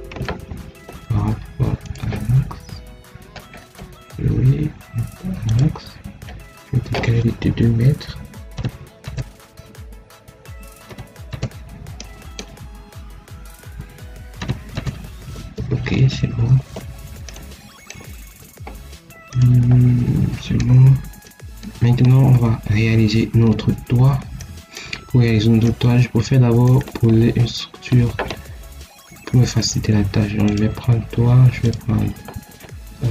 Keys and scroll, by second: 0.0 Escape, 8.4 2, 10.8 2, 11.2 Return, 14.3 2, 14.7 Return.